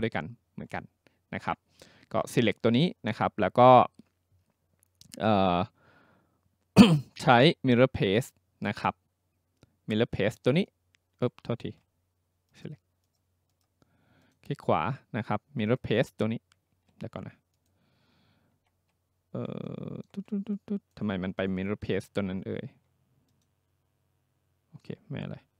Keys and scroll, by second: 11.7 ctrl+z, 16.7 ctrl+z, 18.6 ctrl+c.